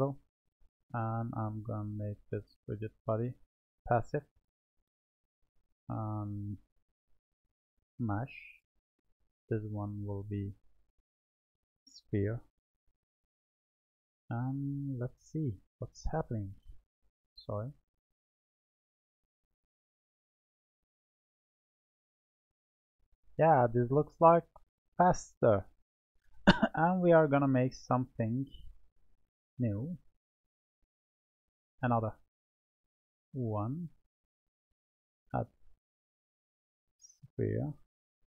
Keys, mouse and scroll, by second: 1.2 click, 2.4-6.3 drag, 6.4-9.5 drag, 11.0-12.6 drag, 12.6-13.8 middle drag, 13.8-15.2 scroll down 3, 15.2 scroll down 1, 15.3 click, 16.8-19.4 middle drag, 19.4-20.3 drag, 20.3-21.1 scroll up 5, 21.1-21.6 scroll down 2, 21.6-26.3 middle drag, 26.8 click, 28.3-29.9 drag, 29.9-33.0 middle drag, 33.1-36.0 drag, 36.0-37.2 middle drag, 37.2 click.